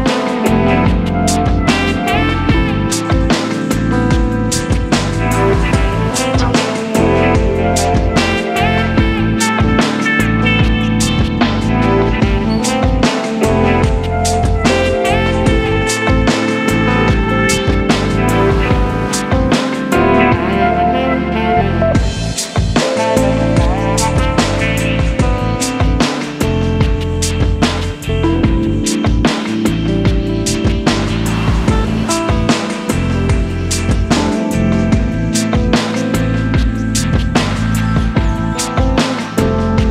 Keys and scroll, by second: 1.0 super+d, 1.9 l, 4.5 super+c, 4.7 super+v, 4.9 super+t, 6.6 super+space, 7.3 Up, 7.4 Left, 8.5 shift+super+t, 10.3 Up, 10.8 Return, 11.3 e, 14.3 l, 17.7 super+c, 18.3 super+-, 18.5 shift+super+t, 20.6 super++, 20.7 super+space, 21.8 Return, 22.0 e, 23.8 space, 30.0-34.1 typing, 35.7 v, 36.2 e, 36.4 space, 36.9 v, 38.7 e.